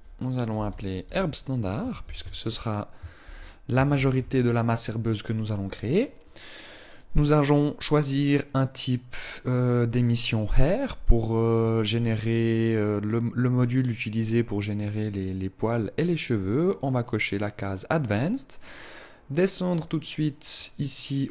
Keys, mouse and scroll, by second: 7.0 click, 16.3 click.